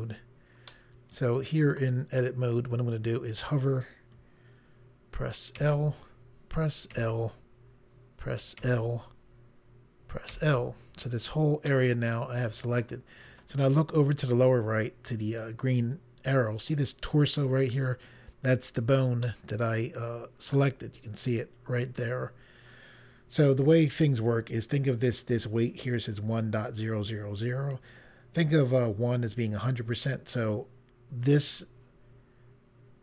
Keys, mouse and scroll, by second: 0.7 middle click, 5.6 i, 7.1 i, 8.6 i, 10.3 i, 11.7 middle click, 15.2 click, 19.3 middle click.